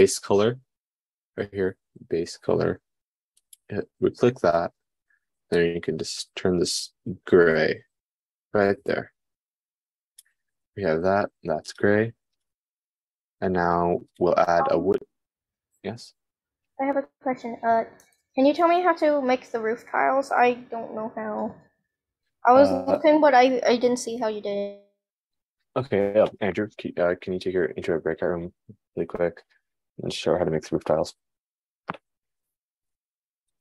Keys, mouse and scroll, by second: 4.1 click, 4.5-33.6 middle drag.